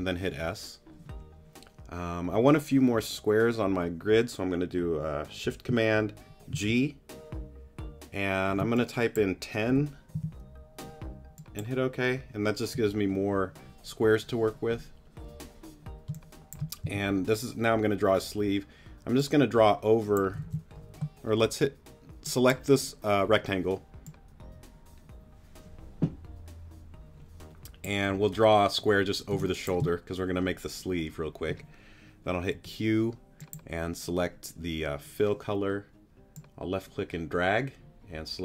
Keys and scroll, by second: 6.5 shift+super+g, 10.1 0, 16.1 space, 16.8 s, 20.4 super+z, 29.3 space, 32.5 p.